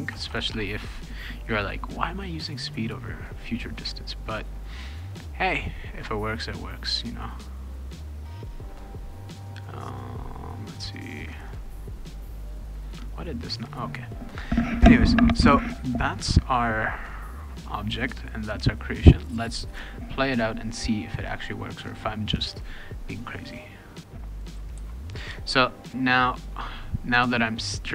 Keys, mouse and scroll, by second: 0.0-0.5 typing, 6.8 click, 8.3 click, 22.3 click, 24.2-25.2 typing, 24.3 click, 25.1-26.7 right drag, 25.5 click, 26.2 click.